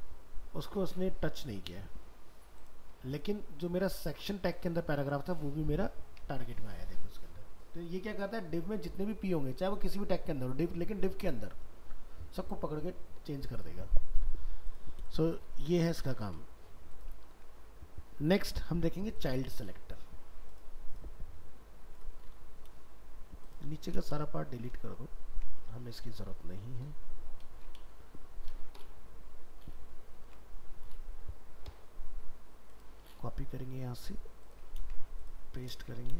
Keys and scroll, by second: 6.4 alt+Tab, 16.2 ctrl+s, 17.3 ctrl+w, 25.3 ctrl+shift+End, 30.1 ctrl+s, 34.7 ctrl+c.